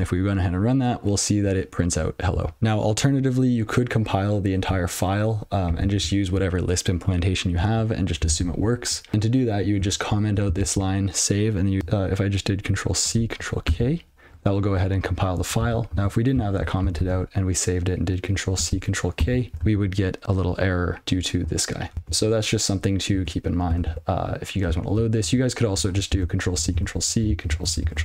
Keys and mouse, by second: 11.8 click, 11.8 ctrl+p, 13.6 ctrl+k, 15.6 ctrl+/, 16.8 ctrl+n, 17.0 ctrl+s, 19.1 ctrl+k, 19.5 super+l, 20.0 click, 21.9 ctrl+/, 22.0 ctrl+?, 23.6 ctrl+/, 23.8 ctrl+s, 24.8 ctrl+n, 25.7 ctrl+p, 26.7 ctrl+c.